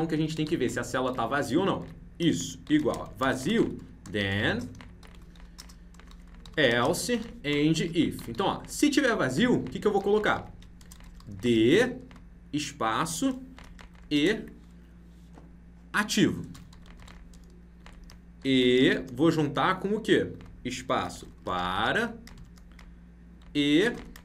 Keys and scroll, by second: 0.4 ctrl+c, 1.7 ctrl+v, 9.5 ctrl+Left.